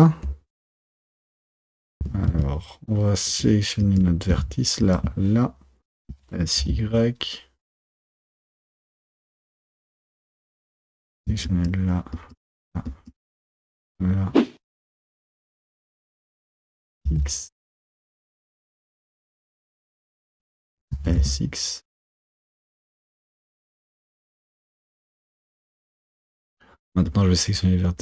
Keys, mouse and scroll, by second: 1.5 Tab, 2.1 Tab, 3.4 1, 3.9 click, 6.2 s, 10.7 click, 12.2 shift+click, 13.7 shift+click, 14.6 s, 16.0 shift+click, 16.6 s, 18.8 shift+click, 19.4 shift+click, 20.1 shift+click, 21.0 s, 27.2 click.